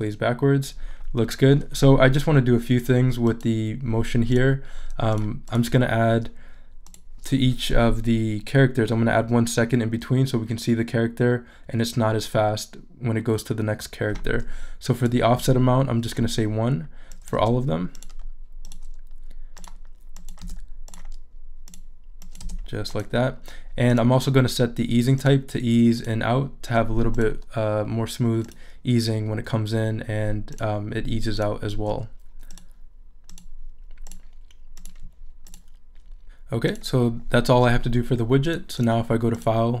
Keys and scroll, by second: 15.3 |, 17.4 |, 20.4 1, 22.4 1.